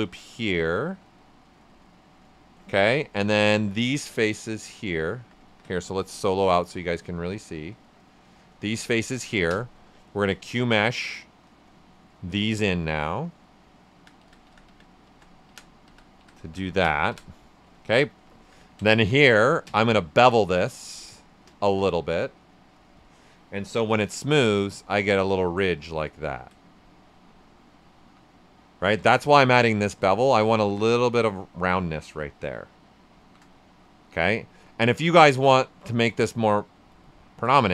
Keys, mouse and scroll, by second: 0.4 space, 0.4-3.6 drag, 3.6-5.4 alt+drag, 5.4 ctrl+z, 5.9 click, 6.4 alt+right click, 7.0-9.4 alt+drag, 9.4 space, 11.7 space, 12.3 right click, 13.2-17.7 drag, 17.7 right click, 18.3 alt+right click, 18.8 ctrl+right click, 19.6 ctrl+space, 21.9-23.8 ctrl+drag, 23.8 ctrl+d, 24.3 shift+f, 24.7 ctrl+shift+right click, 25.2 right click, 25.7 typing, 26.6 right click, 27.9 shift+f, 29.9 d, 30.2 right click, 32.9 right click, 33.1 shift+f, 34.0 right click, 35.6 shift+f, 35.9 shift+right click, 37.4 space.